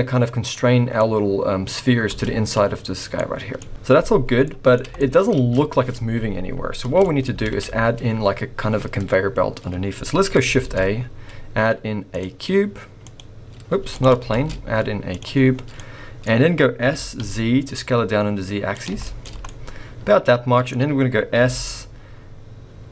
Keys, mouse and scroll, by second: 0.5 middle click, 2.1 space, 3.2 middle click, 3.7 space, 4.5 middle click, 5.0 shift+middle click, 5.3 space, 6.5-6.8 scroll down 3, 6.8 space, 7.0 middle click, 7.4 alt+a, 7.8-9.4 scroll up 4, 10.8 shift+a, 13.8 x, 14.3 shift+a, 15.4-16.3 scroll down 4, 15.7 middle click, 16.3-18.6 scroll up 3, 16.8 s, 19.0 shift+middle click, 19.4 scroll up 1, 19.5 middle click, 21.3 s.